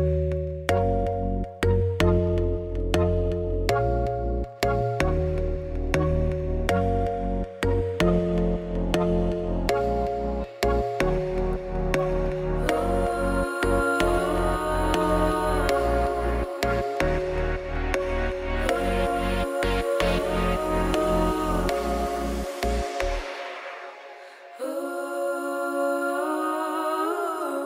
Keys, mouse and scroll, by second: 0.4 click, 1.1 click, 1.5 ], 2.0 alt+d, 4.3 r, 5.0 g, 5.7 click, 5.8 scroll down 2, 6.0 middle click, 6.5 scroll down 1, 6.6 middle click, 7.6 scroll up 2, 7.8 shift+middle click, 8.1-8.9 scroll down 1, 10.2 shift+right click, 10.4 shift+a, 10.8 Tab, 11.2 r, 12.0 5, 12.8 click, 13.1 KP_1, 13.4 shift+middle click, 13.6 scroll up 9, 13.8 shift+middle click, 14.0 s, 14.5-14.8 scroll down 1, 14.8 Tab, 15.3 KP_1, 15.7 s, 16.3 Tab, 16.7 g, 17.6 click, 18.2 g, 19.9 click, 20.2 shift+d, 20.8 shift+d, 21.5 shift+d, 22.4 shift+d, 23.5 shift+d, 25.0 shift+d, 25.5 shift+d, 26.4 shift+d, 27.0 shift+d.